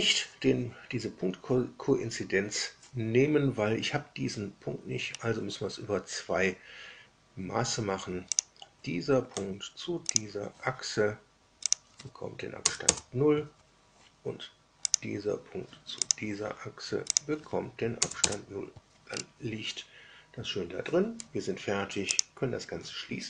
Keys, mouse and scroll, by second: 5.0 scroll up 2, 8.3 click, 10.0 ctrl+click, 11.6 click, 12.5 KP_0, 12.8 KP_Enter, 14.8 click, 16.0 ctrl+click, 17.0 click, 18.0 KP_0, 18.1 KP_Enter, 19.0 scroll down 2, 22.0 click.